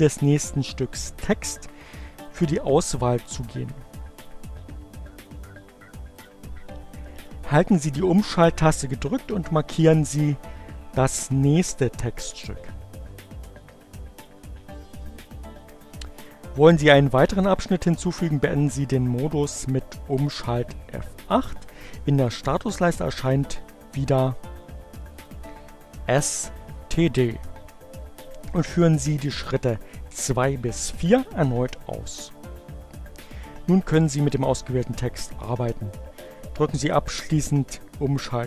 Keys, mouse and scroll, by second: 5.8 click, 11.0 shift+Right, 24.0 shift+F8.